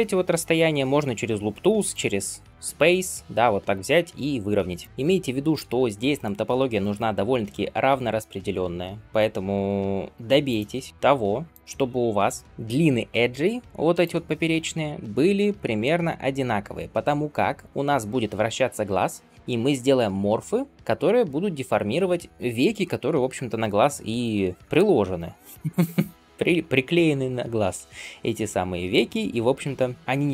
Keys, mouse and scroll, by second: 1.9-2.7 right drag, 4.8-5.4 scroll up 1, 5.5 alt+z, 6.0 scroll up 1, 6.1-9.0 middle drag, 9.0-9.7 scroll down 1, 10.1 scroll up 1, 10.3-13.6 drag, 13.6 2, 13.9 shift+click, 14.7-17.0 drag.